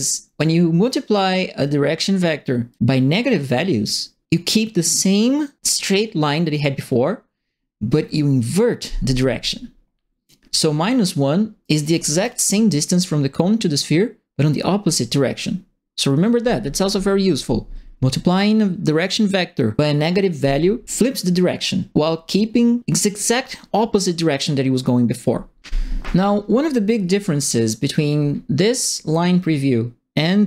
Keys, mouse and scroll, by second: 2.7-10.2 drag, 11.6 right click, 11.9 s, 27.1 click.